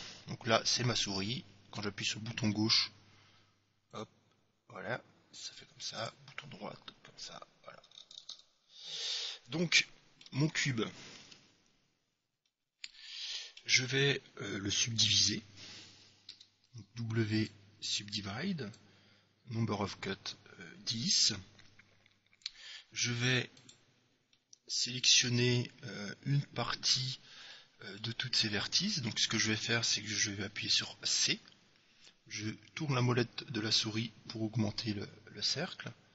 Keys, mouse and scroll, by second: 4.1-6.0 drag, 6.2-8.1 right drag, 8.4 shift+c, 9.4-11.1 middle drag, 11.4 KP_Decimal, 12.3-14.6 middle drag, 15.7-17.7 middle drag, 16.5 w, 18.9-20.6 drag, 23.8-25.0 right drag, 24.6 click, 25.0-26.1 middle drag, 26.2 middle click, 27.7-29.4 middle drag, 30.9 c.